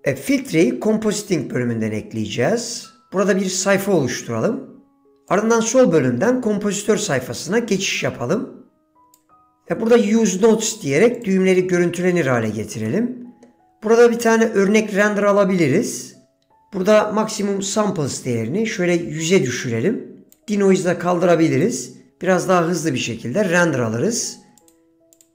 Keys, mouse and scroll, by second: 3.6-5.2 drag, 5.4-7.5 drag, 8.9 click, 11.3 click, 13.0 middle click, 17.5-20.4 drag, 19.3 KP_0, 21.6 click, 24.8-25.3 drag.